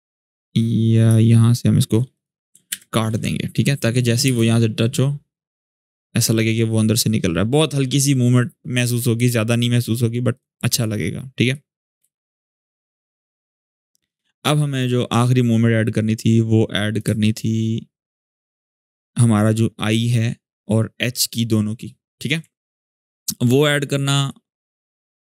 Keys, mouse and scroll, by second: 2.4 alt+[, 3.3-4.2 click, 4.0 space, 5.8-9.2 drag, 9.5 click, 11.8 space, 14.5 space, 14.5-17.0 drag, 17.0 shift+scroll down 1, 19.8-22.3 drag, 22.3 alt+scroll down 1, 24.0-25.2 drag.